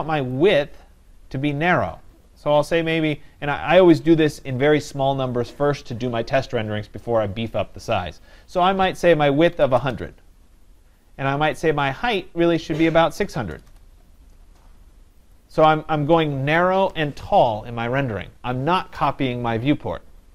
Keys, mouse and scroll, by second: 0.4-5.4 drag, 9.5-10.4 typing, 11.6-12.7 drag, 12.5-13.8 typing, 15.3 click, 19.8 click.